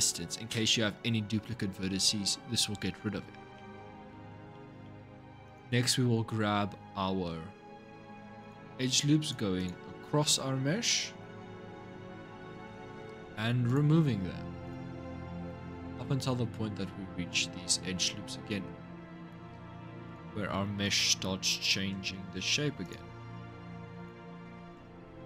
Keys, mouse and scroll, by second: 3.3 middle click, 3.9-4.3 scroll down 5, 4.3 shift+middle click, 5.2 click, 5.6 scroll up 2, 8.2 click, 9.0 alt+shift+click, 9.4 alt+shift+click, 10.7-12.8 middle drag, 12.8-13.4 scroll up 1, 13.4 alt+shift+click, 14.4 alt+shift+click, 14.8-19.8 shift+middle drag, 19.8 alt+shift+click, 20.6 alt+shift+click, 21.6 ctrl+z, 22.6 alt+shift+click, 23.8 alt+shift+click, 24.7 ctrl+z, 25.1 alt+shift+click.